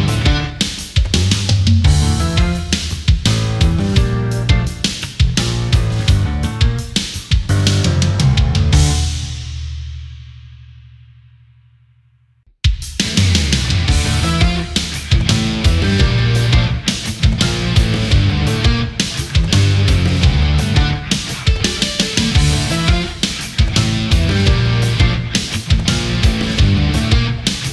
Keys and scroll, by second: 3.5 space, 15.4 ctrl+z, 21.2 space, 22.3 space.